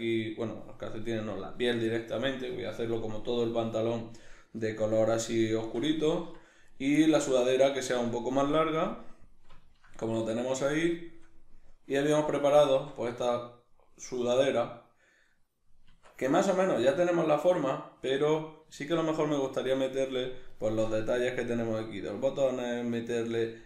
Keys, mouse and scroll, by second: 6.6 right click, 7.0-23.6 middle drag, 12.7 Tab, 15.9 Tab.